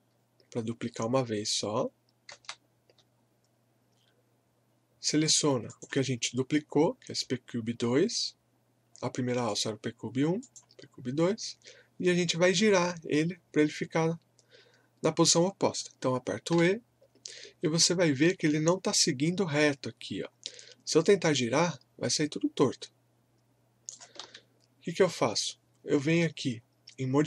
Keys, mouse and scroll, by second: 2.3 ctrl+d, 5.2 click, 9.5 click, 16.5 e, 20.4 scroll up 1, 21.2-24.3 drag, 24.3 ctrl+z.